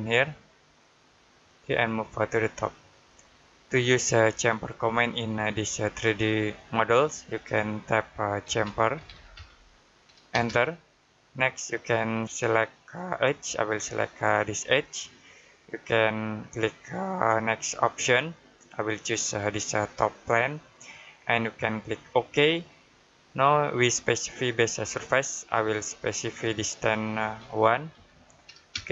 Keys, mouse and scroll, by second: 3.3 middle click, 4.7 f, 6.6 Escape, 8.3-10.2 typing, 14.4 click, 18.0 click, 21.9 click, 25.8 click, 27.8 1, 28.6 space.